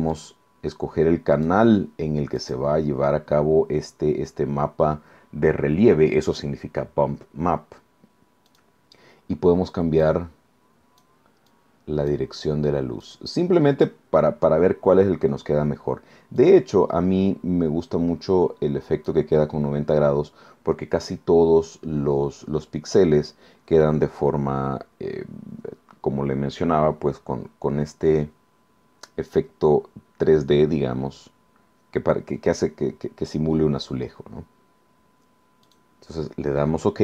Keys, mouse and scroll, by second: 0.1 click, 1.3 click, 2.4 click, 8.5 click, 10.0-11.2 drag, 11.5-12.3 drag, 13.0 click, 16.4-19.3 drag, 35.7 click.